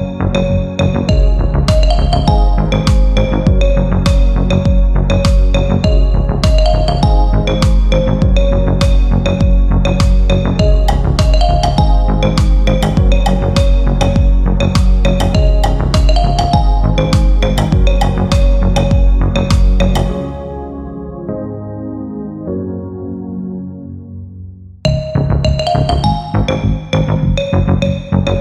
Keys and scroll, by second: 1.5 shift+F2, 1.9 Escape, 5.7 shift+F2, 12.1 g, 23.4 F3, 24.4 ctrl+g, 27.4 c.